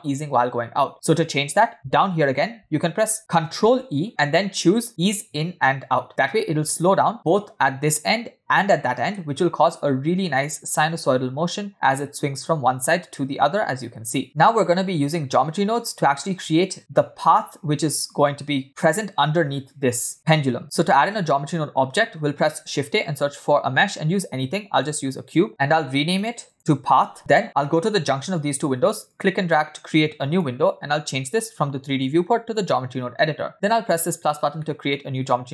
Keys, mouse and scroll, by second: 0.8 space, 5.2 ctrl+e, 9.1 space, 14.2 space, 15.0-17.9 drag, 21.0 click, 22.1 scroll down 1, 22.7 shift+a, 26.6-28.6 shift+drag, 29.3-30.5 drag, 31.2-32.7 drag, 33.5 click, 34.6 middle click, 35.0 scroll up 1.